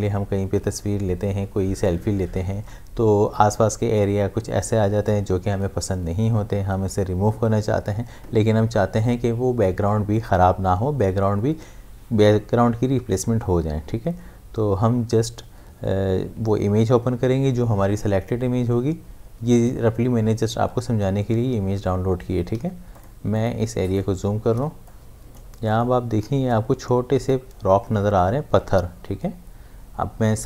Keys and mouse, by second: 22.5 space, 23.0 ctrl+click, 24.7 space, 24.9 click, 25.2 space, 25.7 ctrl+click, 26.3 space, 26.5 click, 26.8 space.